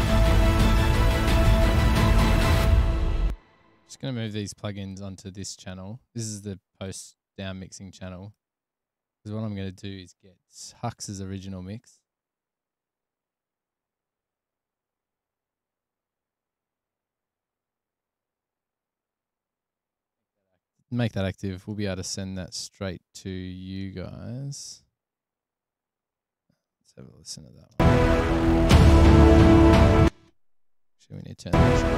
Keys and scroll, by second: 3.5 space, 28.0 space, 30.2 space, 31.8 space.